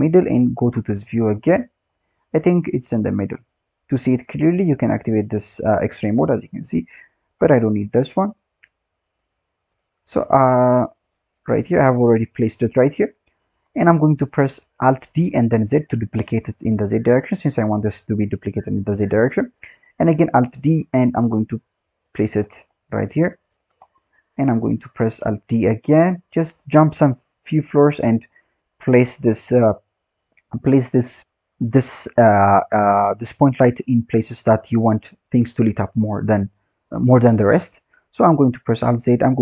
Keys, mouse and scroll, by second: 0.6 click, 1.2-1.8 scroll down 4, 1.8-2.7 scroll up 5, 2.7 g, 5.3 click, 5.7-7.2 scroll up 7, 7.2 click, 7.5-7.9 scroll down 14, 8.6 click, 9.6 click, 11.0 click, 11.9-12.9 scroll up 5, 12.9-14.2 scroll down 8, 14.2-15.1 scroll up 9, 15.1 alt+d, 17.6-18.4 scroll down 3, 18.4-18.7 scroll down 7, 18.7-19.7 scroll up 7, 19.7-20.6 scroll down 1, 20.6 alt+d, 22.3-22.8 scroll up 8, 23.1 g, 23.8-24.5 scroll down 8, 24.5-25.1 scroll up 2, 25.1 alt+d, 26.2-26.8 scroll down 2, 26.8-27.4 scroll up 3, 27.4-28.2 scroll up 1, 28.2 alt+d, 29.6-31.2 scroll down 10, 31.2 scroll up 4, 33.6 scroll down 2, 33.9-37.0 scroll up 2, 38.5 alt+d.